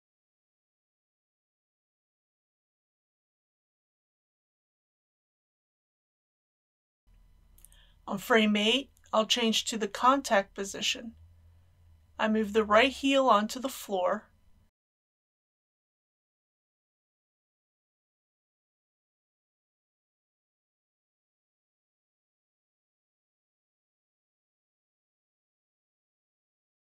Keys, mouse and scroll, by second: 1.1-8.1 drag, 9.9-13.0 scroll down 1, 13.0 click, 15.7 g, 19.1 click, 19.2 r, 20.8 click, 22.8 g, 24.0 click, 24.8 a, 25.0 g, 26.0 shift+click.